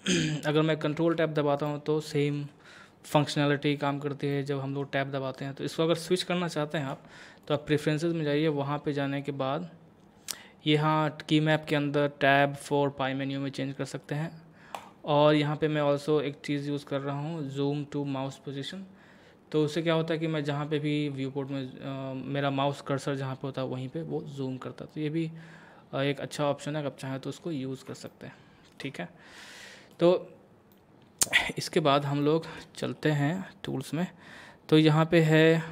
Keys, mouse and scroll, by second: 0.9 ctrl+Tab, 1.7-6.8 middle drag, 6.8 F4, 7.4 click, 14.7 click, 19.6 click, 20.4 scroll down 1, 21.3 scroll up 1, 23.3 scroll down 1, 28.1-30.7 shift+middle drag, 30.7 middle click, 31.4-32.0 scroll up 1, 32.2 shift+middle click, 32.9-34.0 scroll down 1.